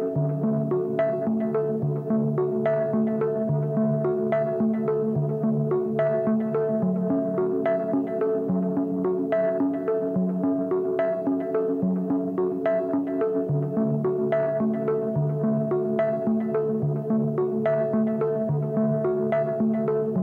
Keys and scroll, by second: 4.8 Return.